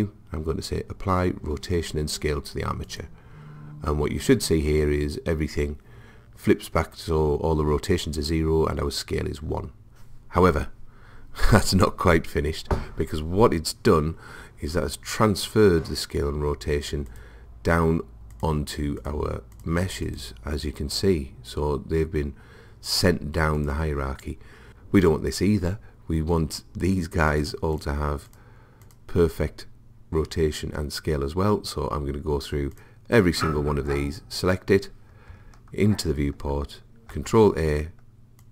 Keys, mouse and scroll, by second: 17.1-22.0 drag, 22.0-23.6 middle drag, 23.6 click, 24.7-27.3 middle drag, 27.3-30.8 drag, 32.8 click, 34.7 click, 37.2 ctrl+a.